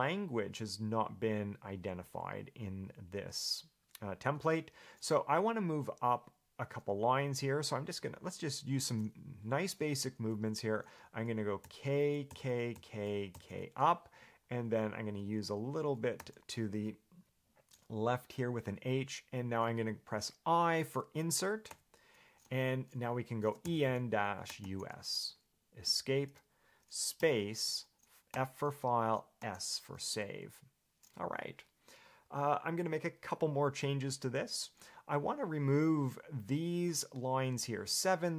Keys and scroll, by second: 11.8 k, 12.5 k, 12.9 k, 13.5 k, 16.4 h, 21.9 i, 23.5-25.3 typing, 26.1 Escape.